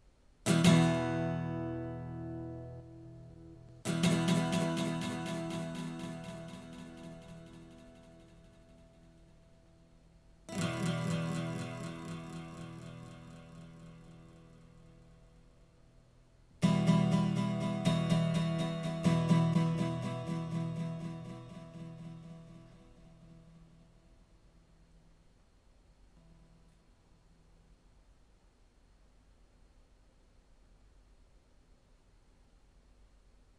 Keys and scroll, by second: 0.1 w, 0.4 space, 3.3 space, 3.6 w, 19.5 space, 21.0 shift+super+r, 22.1 Return.